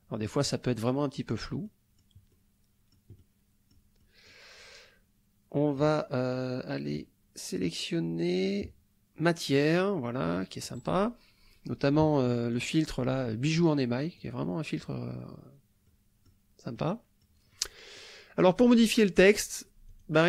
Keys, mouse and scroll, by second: 1.0 click, 1.7 click, 2.3-3.9 drag, 4.0 click, 8.4 click, 9.5 click, 10.3 click, 12.3 middle click, 13.3 middle click, 14.2 click, 15.9 middle click, 16.8 click, 17.5 click, 19.9 click.